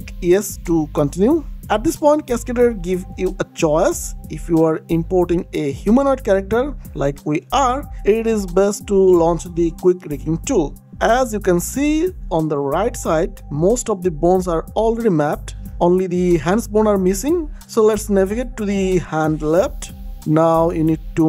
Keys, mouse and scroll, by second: 1.7 click, 10.7 click, 13.7 click, 20.4-20.7 scroll down 1.